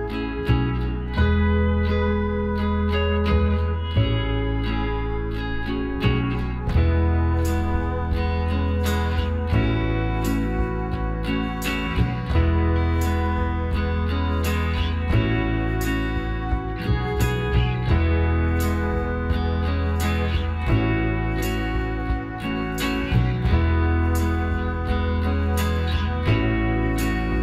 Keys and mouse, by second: 6.0 r, 8.2 g, 12.0-14.3 drag, 12.7-14.4 right drag, 13.6-16.5 middle drag, 14.9-22.9 drag, 22.9-25.3 middle drag, 22.9 e, 26.1 g.